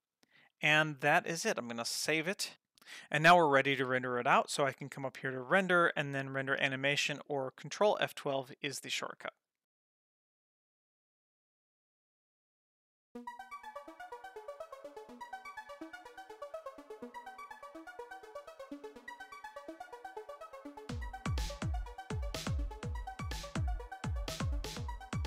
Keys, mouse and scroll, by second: 5.4-9.6 drag.